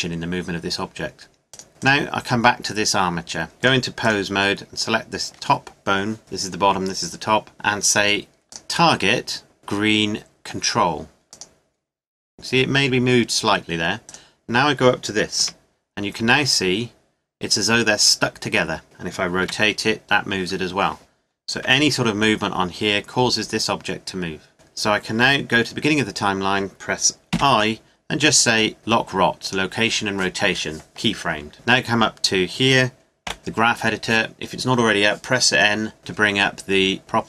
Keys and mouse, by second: 1.5-3.4 right drag, 3.6 click, 5.5-8.5 middle drag, 9.6-12.0 middle drag, 14.0-16.0 right drag, 15.4 g, 19.4 r, 21.5 g, 27.3 i, 31.5 n, 33.2 n.